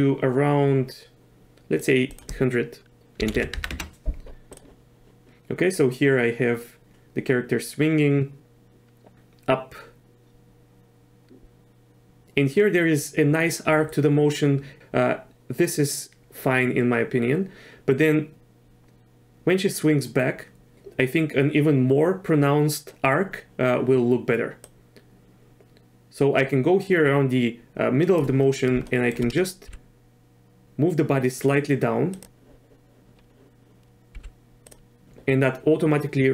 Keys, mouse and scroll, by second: 3.3 KP_1, 5.8-14.3 drag, 14.3-17.7 right drag, 17.7-20.7 drag, 24.6-28.2 drag, 28.8 shift+drag, 29.6 g, 34.1 g.